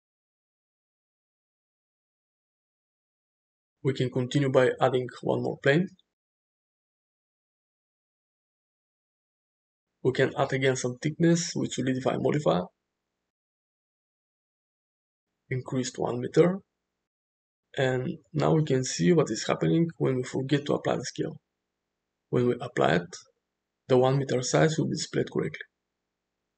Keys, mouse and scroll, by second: 0.5 space, 2.4 space, 3.1-4.4 middle drag, 5.9 shift+a, 6.6 s, 10.9-13.0 drag, 13.5 middle click, 14.7-16.2 drag, 16.7-17.3 middle drag, 17.7 middle click, 18.8 middle click, 21.2 ctrl+a, 23.1 middle click, 24.8 middle click.